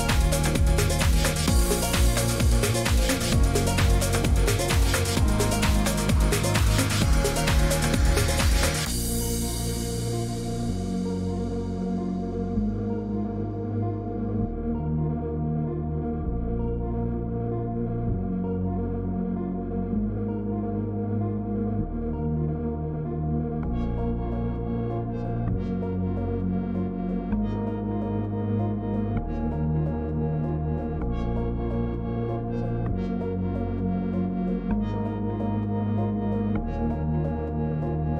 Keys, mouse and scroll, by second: 0.8-1.8 scroll up 17, 2.0 scroll, 2.6 click, 6.7 click, 7.7 click, 12.6 click, 14.5 click, 17.3 click, 18.9 click, 20.1 click, 21.7 scroll, 23.0 scroll down 3, 23.4 shift+click, 23.8 scroll up 3, 27.7 click, 29.3 click, 30.6 click, 31.9 click, 33.8 click, 34.7 1, 34.9 Return.